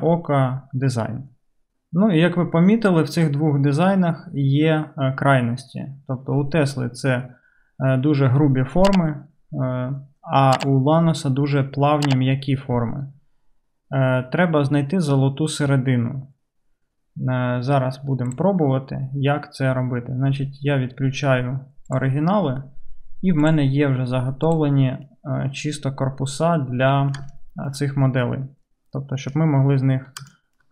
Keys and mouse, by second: 1.7 click, 1.7 right click, 7.4 drag, 7.4 right drag, 8.1-15.7 drag, 8.1-10.7 right drag, 15.7 right click, 16.5-18.3 drag, 18.3-22.1 middle drag, 22.1-23.5 right drag, 23.5 middle click, 23.7 right click, 24.5 middle click, 24.6-26.0 right drag, 26.0-29.1 middle drag, 29.1-30.3 right drag, 29.2 middle click, 30.3 shift+drag, 30.4 shift+middle click, 30.5 shift+right click, 30.6-30.7 shift+middle drag.